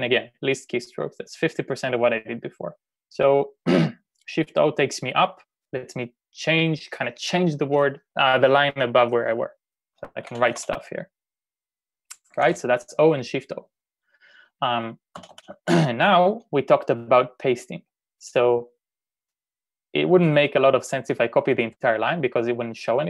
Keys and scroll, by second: 9.9-10.7 typing, 12.1-12.8 typing, 15.3 typing.